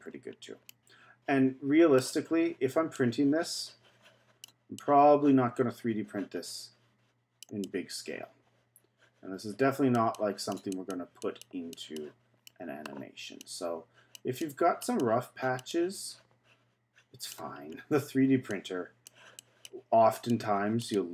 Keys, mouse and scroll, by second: 0.7-2.9 middle drag, 2.9-12.5 drag, 12.5 middle click, 13.4-17.7 drag, 17.7-18.5 scroll up 2, 18.5-21.1 drag.